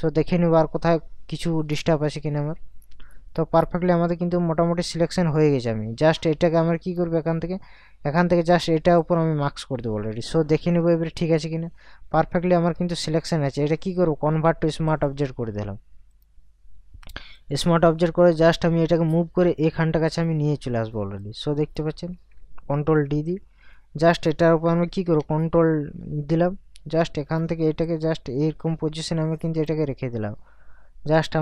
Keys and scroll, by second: 10.8 ctrl+KP_Subtract, 23.1 ctrl+d, 24.8 ctrl+t.